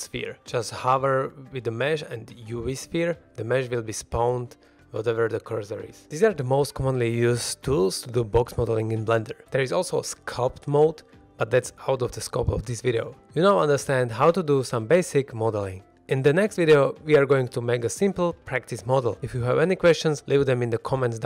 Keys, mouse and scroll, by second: 3.9 middle drag, 4.2 shift+middle drag, 4.7-5.1 scroll up 2, 5.1 shift+scroll down 1, 5.2 shift+middle drag, 5.5 middle click, 7.5-7.8 middle drag, 8.0 scroll down 1.